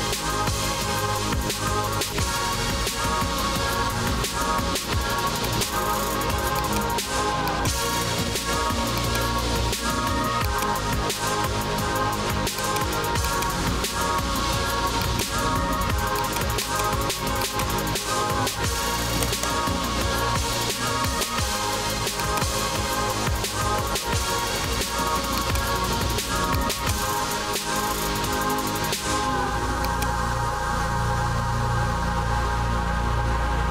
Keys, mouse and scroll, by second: 0.6-1.9 typing, 5.6 click, 6.1 1, 6.4 1, 6.7 click, 7.6 click, 9.1 click, 10.5 click, 12.7 click, 13.3 click, 13.8-14.3 scroll, 15.1 click, 16.7 click, 16.7-17.1 scroll, 17.5 click, 19.3 right click, 21.1 click, 22.3 click, 22.8-24.0 typing, 24.5 scroll, 25.5 click, 26.7 click, 26.9 click, 29.9 click, 30.3-32.4 typing.